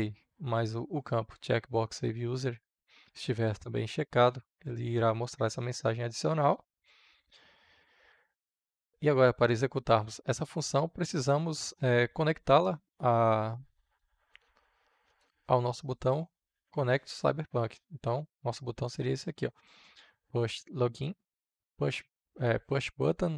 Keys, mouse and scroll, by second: 8.7 ctrl+s, 14.2-20.7 drag.